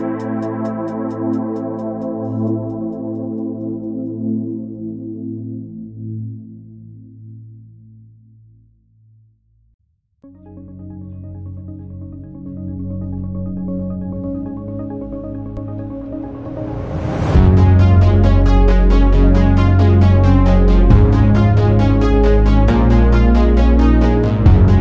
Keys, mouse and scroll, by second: 0.6 alt+z, 1.3 shift+r, 2.1 Tab, 3.5 ctrl+r, 8.7-9.2 scroll up 3, 9.2-10.2 shift+middle drag, 10.2 ctrl+r, 12.9 r, 17.0 r, 20.0-21.4 middle drag, 21.4 r.